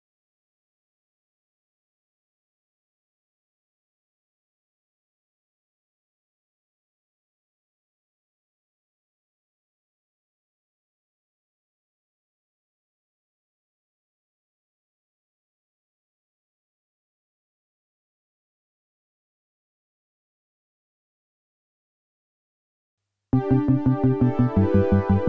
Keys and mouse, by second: 3.3 shift+middle click, 7.9 shift+middle click, 9.2 shift+middle click, 12.5 a, 14.2 e, 15.4 s, 17.1 click, 18.5 shift+middle click, 19.3 s.